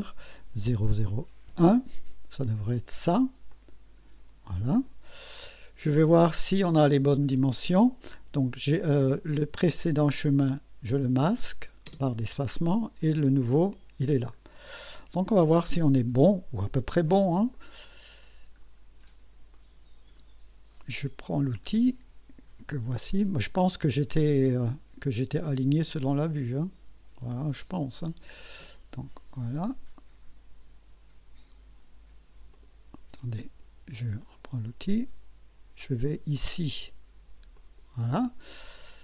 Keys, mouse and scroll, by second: 0.7 0, 1.5 1, 3.5 click, 9.7 click, 11.9 space, 13.5 click, 14.4-14.7 scroll up 2, 16.0 scroll up 2, 17.1 middle click, 17.9-18.4 right drag, 18.6-19.3 scroll up 4, 19.6 right click, 24.3 click, 26.1 click, 29.6 click, 32.6 click, 34.3 click, 37.6 click, 38.7-39.0 scroll down 4.